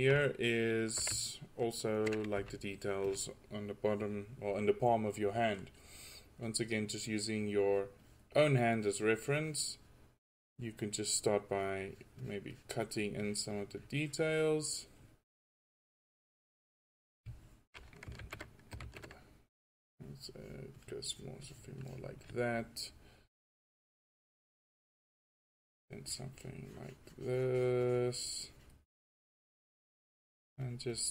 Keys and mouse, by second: 2.4 f, 7.3-16.6 drag, 18.4 ctrl+z, 19.0 ctrl+z, 19.7-22.1 drag, 23.8-25.0 middle drag, 29.7-30.7 middle drag.